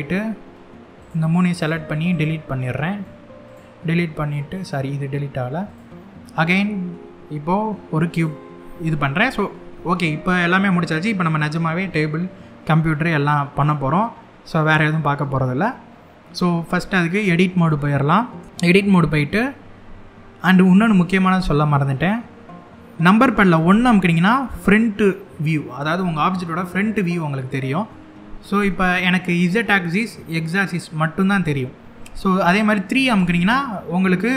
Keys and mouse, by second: 2.7 x, 4.2 click, 6.0 shift+a, 8.7-9.1 drag, 18.1 Tab, 23.3 KP_1, 32.8 KP_3.